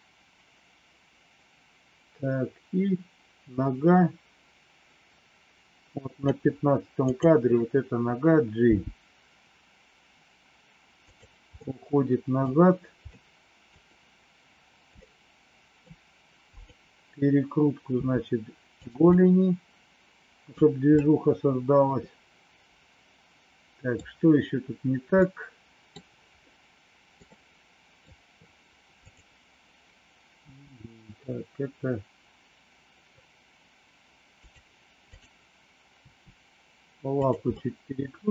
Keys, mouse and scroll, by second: 8.5 g, 11.6 middle click, 13.3 middle click, 15.0 middle click, 17.9 r, 19.1-20.5 middle drag, 21.0-23.8 middle drag, 25.1 middle click, 26.5 middle click, 27.2 middle click, 30.4 r, 35.1 click, 36.0 r, 37.5-38.3 middle drag.